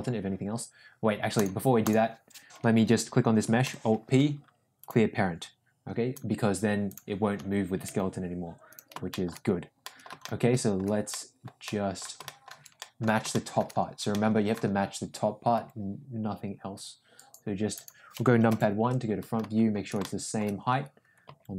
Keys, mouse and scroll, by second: 0.2 ctrl+z, 3.6 alt+p, 7.8 g, 9.2 shift+middle click, 9.9 middle click, 10.2-10.8 middle drag, 11.2 middle click, 11.7 middle click, 12.2-12.5 shift+middle drag, 12.8 middle drag, 13.4 shift+middle click, 14.1 middle click, 15.5 g, 18.4 KP_1, 20.1 shift+middle drag, 21.2 g.